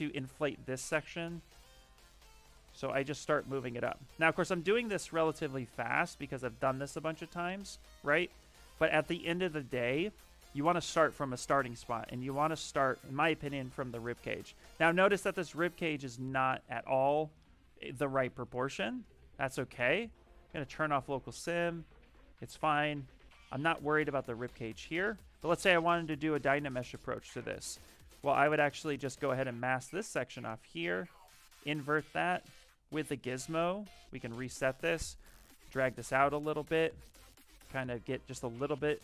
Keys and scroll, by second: 0.8-1.9 typing, 15.1 s, 20.9 s, 22.0 s, 25.2 s, 32.1 e, 33.6 x, 38.1 q.